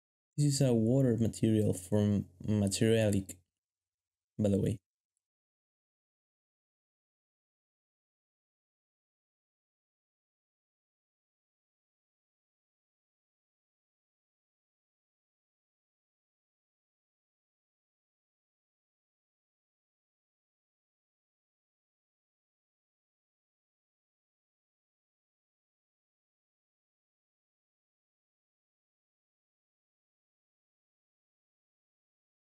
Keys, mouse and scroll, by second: 13.0 ctrl+b, 30.2 ctrl+b.